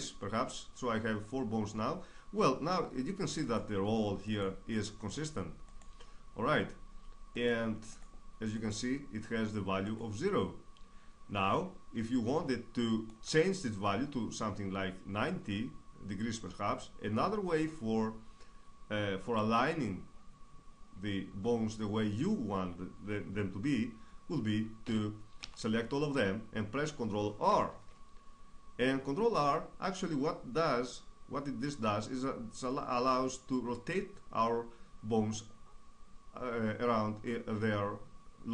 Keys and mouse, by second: 3.1-11.1 right drag, 24.5 a, 25.0 a, 27.1 ctrl+r.